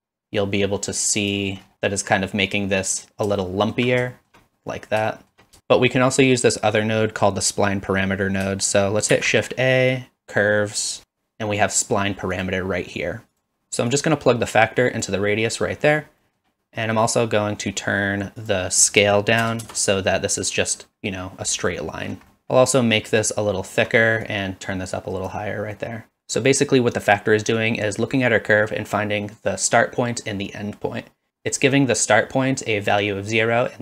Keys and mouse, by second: 3.4 shift+middle click, 4.1 shift+middle drag, 5.1 shift+middle drag, 5.6 ctrl+x, 9.1 shift+a, 13.9-15.1 drag, 16.0 middle click, 16.4 middle click, 18.4-20.0 drag, 22.3 middle click, 22.4 ctrl+z, 23.2 shift+click, 24.2-25.3 drag, 25.7 middle click.